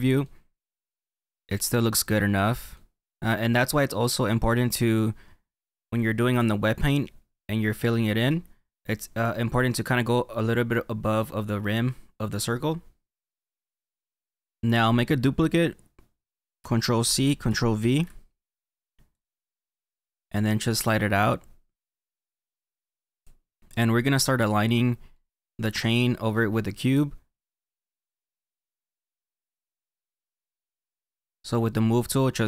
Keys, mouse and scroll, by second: 1.0 middle click, 2.4 middle click, 3.0 middle click, 3.5 middle click, 12.8-14.4 middle drag, 14.4 click, 18.3 ctrl+v, 19.7 click, 25.1 middle click, 29.9-31.2 drag.